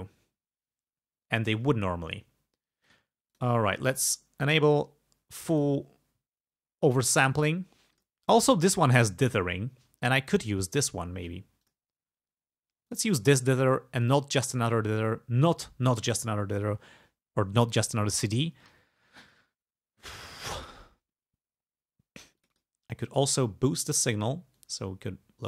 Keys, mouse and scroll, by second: 1.5 click, 2.9 click, 3.4 click, 5.6 click, 8.0 click, 11.7 click, 12.9 click, 14.0 click, 22.4 click, 24.6-25.4 drag.